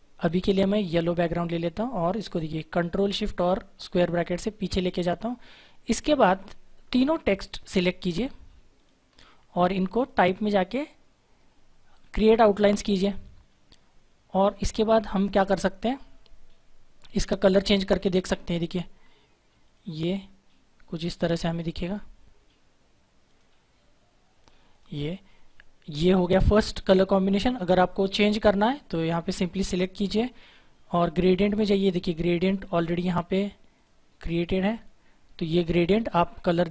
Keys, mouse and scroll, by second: 1.3 click, 3.7 ctrl+shift+[, 5.1 click, 7.4 shift+click, 17.5 click, 21.3 shift+click, 29.2 click, 32.4 click.